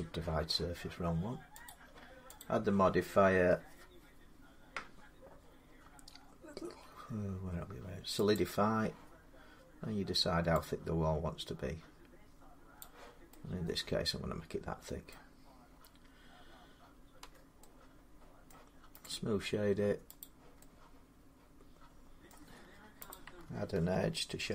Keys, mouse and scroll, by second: 1.5 click, 2.2 click, 8.1 click, 12.6 click, 14.9 middle click, 17.0 Tab, 18.3 middle click, 18.8 right click, 20.0 click, 22.1 middle click, 22.2 Tab, 22.9 click, 24.2 ctrl+r.